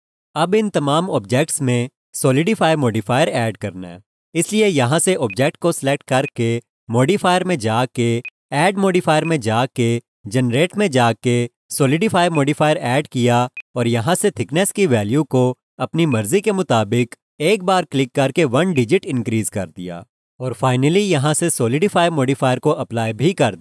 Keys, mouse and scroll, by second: 5.3 click, 12.3 click, 13.5 alt+click, 16.1 click, 17.0 alt+click, 18.4-18.7 scroll up 1, 23.0 click.